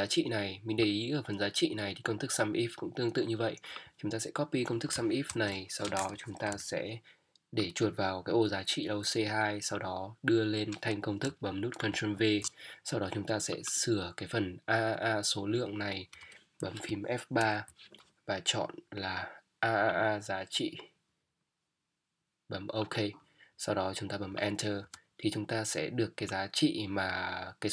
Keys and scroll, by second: 4.9 Up, 5.3 ctrl+c, 11.3 Up, 16.1 BackSpace, 17.4 F3, 24.8 Return.